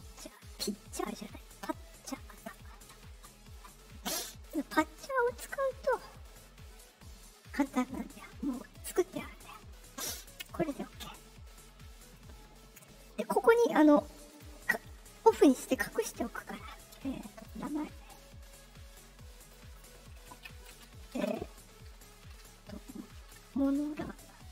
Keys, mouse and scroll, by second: 2.2 click, 4.4 click, 5.8 click, 8.6 click, 10.1 click, 14.2 click, 15.9 click, 17.3 click, 18.4 middle click, 19.3 click.